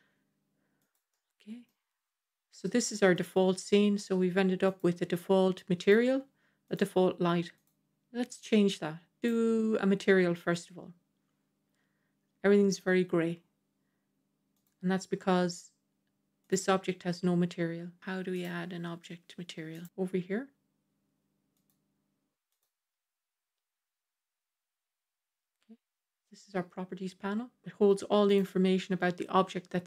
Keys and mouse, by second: 1.0-1.5 middle drag, 2.5 g, 3.4 middle click, 4.5 click, 6.5 click, 7.4 click, 14.5 click, 16.4 click, 18.2 click, 19.6 click, 21.5 click, 28.2 click.